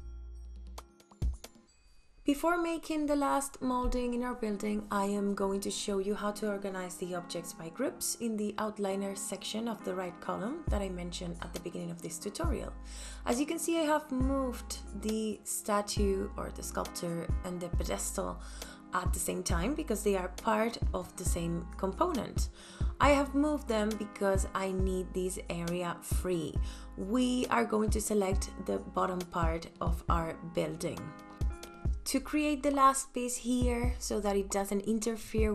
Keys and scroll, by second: 21.9 m, 29.4 space.